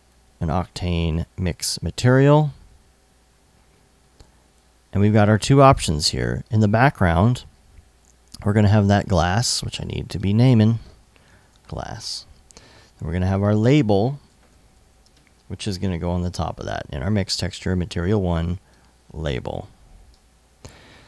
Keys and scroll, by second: 10.7-11.7 typing, 13.9-15.0 typing.